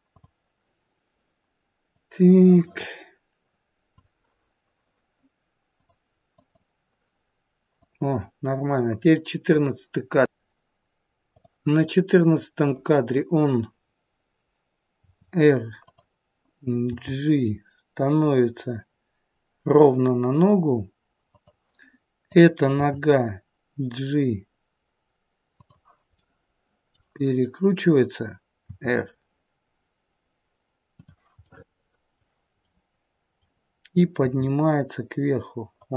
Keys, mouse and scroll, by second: 0.1 click, 2.0 click, 5.7 click, 6.3 click, 11.3 click, 12.7 click, 14.9 r, 16.8 g, 22.3 click, 22.8 g, 26.0 middle click, 27.3 middle click, 28.6 r, 31.3 middle click, 32.5 middle click, 34.1 g.